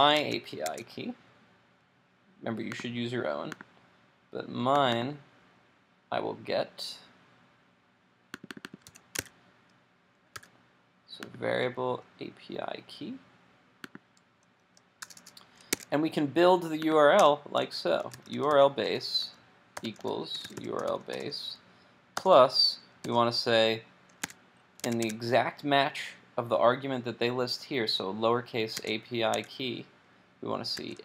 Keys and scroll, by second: 0.3 super+Tab, 8.9 super+c, 9.3 super+w, 10.4 super+v, 24.2 super+Tab, 25.0 super+Tab, 28.8 super+Tab.